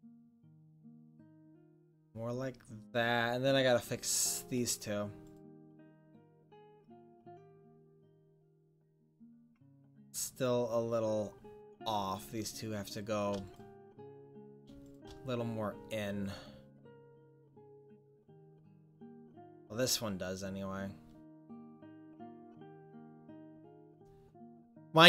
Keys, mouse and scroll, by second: 0.9-3.9 middle drag, 5.3 right click, 7.1 click, 7.5 middle click, 12.2-19.1 right drag, 19.5-22.4 right drag, 22.7-24.1 middle drag, 24.4 middle click, 24.6 middle click.